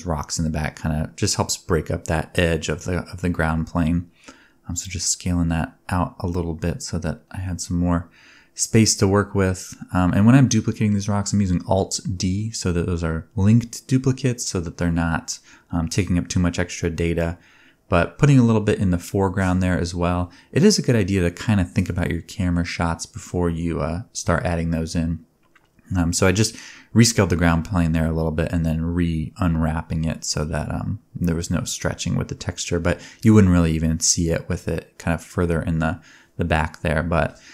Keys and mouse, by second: 0.6 Tab, 2.8 click, 3.8 shift+click, 4.5 alt+d, 4.9-6.7 drag, 5.1 g, 6.2 g, 6.7-7.3 middle drag, 7.3 click, 7.4-8.8 shift+middle drag, 7.5 g, 8.6-12.1 typing, 8.8-13.8 drag, 13.8 middle click, 14.9 Tab, 15.5 e, 17.6 a, 17.9 u, 18.7-22.3 drag, 19.2 a, 19.4 s, 22.5 Tab, 23.5 Tab, 23.6 Tab, 23.8 Tab, 24.3 Tab, 24.3-25.0 drag, 25.0-25.5 middle drag, 27.4 KP_0, 29.0 click, 29.9-31.1 middle drag, 31.1-32.1 drag, 32.1 middle click, 32.5-37.0 drag, 37.0-37.5 middle drag.